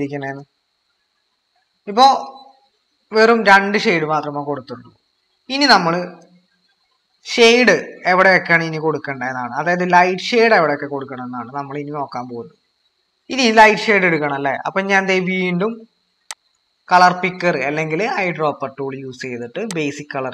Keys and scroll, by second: 12.8 typing.